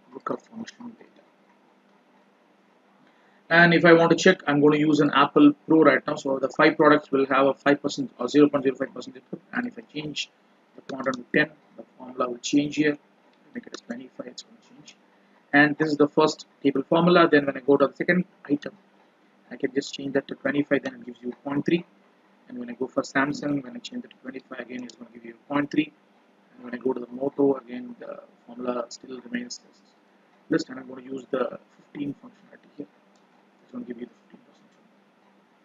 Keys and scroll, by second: 1.5 F4.